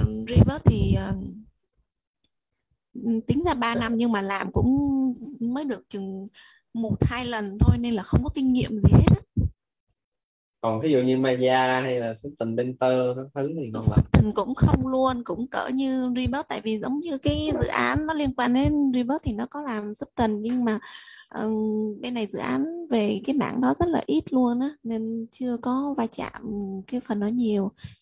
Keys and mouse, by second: 0.0-0.4 typing, 18.4-20.1 typing, 21.9 click.